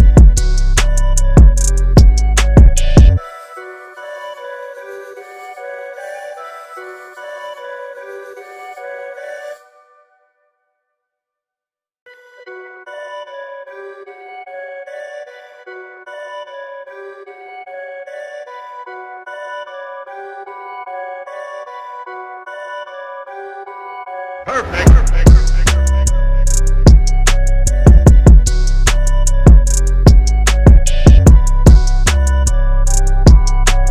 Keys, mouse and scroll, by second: 0.1-0.8 scroll down 1, 4.3-5.8 scroll up 1, 6.1 scroll up 1, 8.6 scroll down 1, 10.3-11.3 scroll down 1, 11.3 scroll up 1, 14.1-16.3 scroll up 1, 16.8-17.7 scroll up 1, 18.0-18.9 scroll up 1, 21.0-21.6 scroll down 1, 22.7-23.3 scroll up 1, 23.3-24.6 scroll down 1, 24.6 click, 29.7 space, 30.1 click, 31.2 space, 33.4 click.